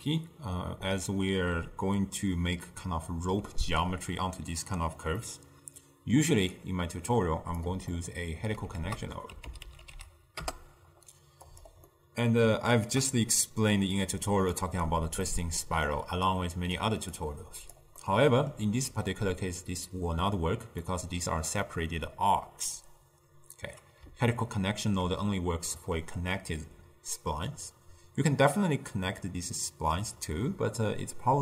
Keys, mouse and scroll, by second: 5.3-6.5 middle drag, 6.5 click, 7.2 click, 8.0 ctrl+middle click, 8.8 ctrl+a, 12.0-14.0 middle drag, 14.0-15.3 drag, 15.3-16.4 middle drag, 16.4 click, 17.3 click, 18.1-24.0 middle drag, 24.3-27.4 ctrl+middle drag.